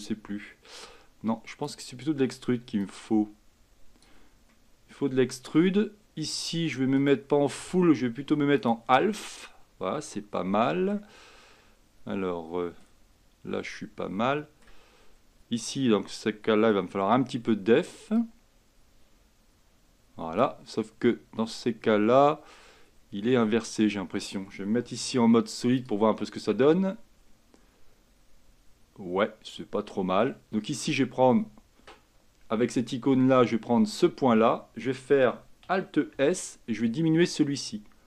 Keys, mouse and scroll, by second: 3.0-4.6 drag, 4.6-7.1 middle drag, 7.1-9.3 drag, 9.3-11.5 middle drag, 11.5-13.0 scroll up 5, 13.0-14.4 scroll up 1, 14.4 middle click, 15.0-15.9 scroll up 2, 15.9-16.9 scroll up 1, 16.9-17.6 scroll up 1, 17.6-18.1 scroll up 1, 18.3-21.6 drag, 21.6-23.4 scroll up 1, 23.4-25.1 middle drag, 25.1 z, 26.3-29.3 middle drag, 32.9-36.3 drag, 36.3 alt+s.